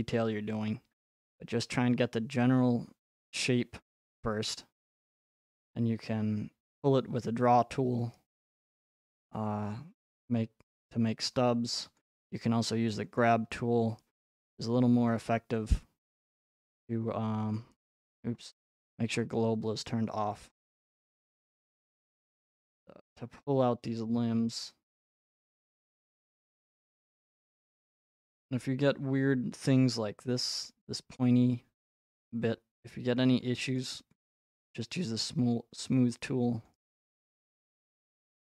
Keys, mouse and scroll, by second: 1.9 right click, 5.1 click, 7.0 right click, 8.6 click, 9.2 right click, 12.0 click, 13.2 click, 14.7 click, 15.7 right click, 17.6 click, 19.3 click, 22.4 click, 22.9-24.4 scroll, 25.0 click, 27.1 click, 28.1 click, 29.6 middle click, 31.9 click, 33.8 click, 34.5 click, 36.7 click.